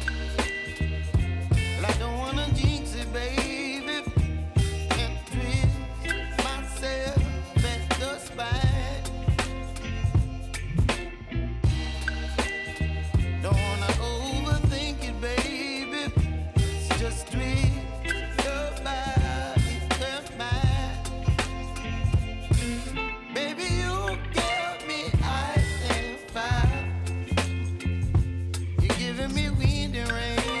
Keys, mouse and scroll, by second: 2.2 space, 3.1 click, 7.8 click, 9.9 ctrl+c, 10.5 click, 11.8 ctrl+v, 12.2 u, 13.4 click, 14.2 ctrl+d, 14.9 click, 15.1 click, 15.7 [, 18.3-21.0 drag, 26.6 space, 29.7 space, 30.3 click.